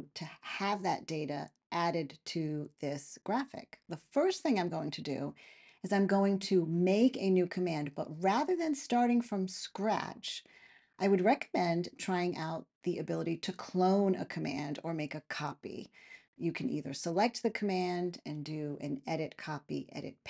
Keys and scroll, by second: 6.1-7.9 typing, 8.3 Return.